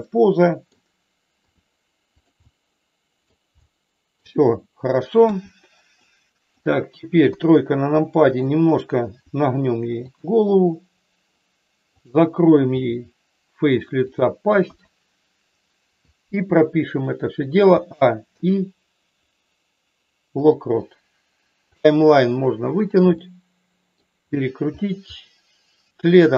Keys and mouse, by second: 1.4 r, 2.3 middle click, 3.6 middle click, 5.3 KP_1, 5.9 middle click, 7.2 KP_3, 8.3 click, 9.2 r, 10.1 click, 11.8 click, 12.7 r, 14.7 KP_1, 17.7 a, 18.3 i, 21.9 click, 23.2 middle click.